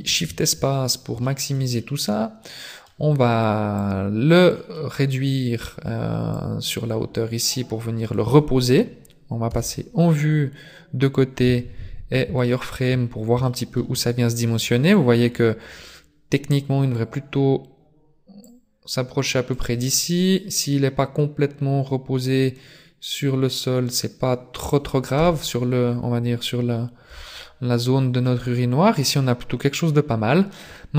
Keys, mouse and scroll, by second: 0.0 shift+space, 0.8-1.2 scroll down 2, 1.2 shift+middle click, 1.8 middle click, 3.8 click, 4.8 middle click, 6.3 click, 9.5 KP_3, 11.4 z, 12.4 shift+middle click, 12.9 scroll up 1, 13.2 shift+middle click, 15.0 click, 18.5 click, 20.3 click, 25.2 KP_0, 26.6-27.6 scroll up 2, 27.0 z, 27.6-28.3 scroll up 1, 29.0-29.8 scroll down 1, 29.8 scroll down 1.